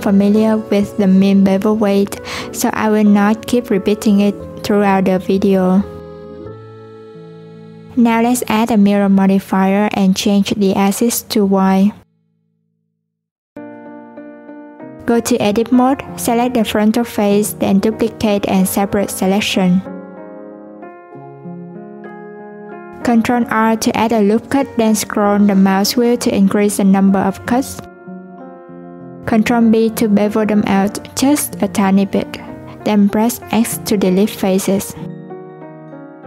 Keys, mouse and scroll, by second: 2.8 a, 3.8-5.8 drag, 8.0 Tab, 10.1-13.1 drag, 13.6 click, 14.5 click, 16.7 click, 18.6 shift+d, 19.6 p, 21.2 Tab, 21.7 click, 22.1 click, 22.8 Tab, 23.0 a, 23.3 ctrl+r, 29.3 ctrl+b, 34.0 x, 35.8-36.2 scroll down 2.